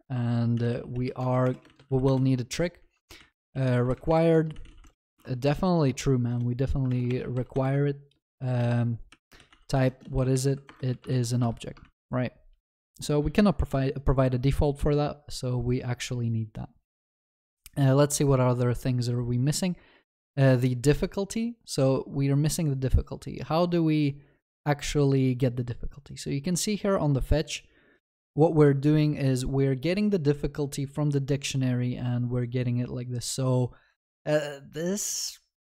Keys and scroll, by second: 6.9 ctrl+BackSpace, 10.7 Return.